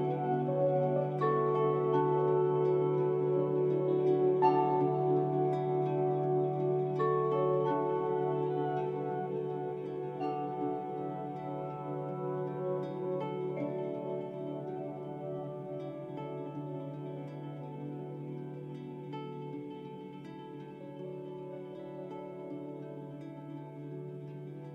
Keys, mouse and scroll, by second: 8.1 Escape, 15.0 2, 15.2 0, 15.4 Return, 16.5 Escape.